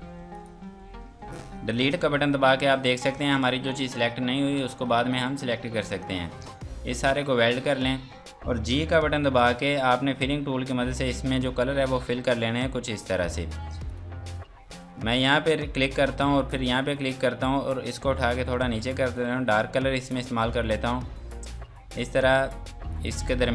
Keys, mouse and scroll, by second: 0.3 shift+click, 0.7 scroll down 1, 2.8 Delete, 7.2 click, 8.9 g, 10.3 click, 13.9 click, 22.9 click.